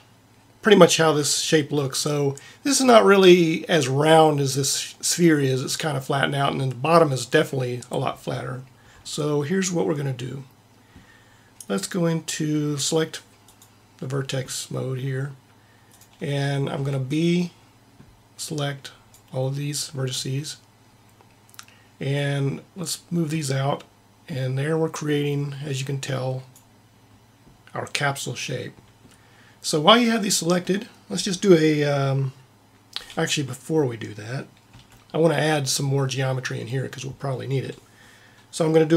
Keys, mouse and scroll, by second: 13.5-15.3 drag, 15.9-17.7 drag, 16.7 b, 22.2-23.9 drag, 34.7 a.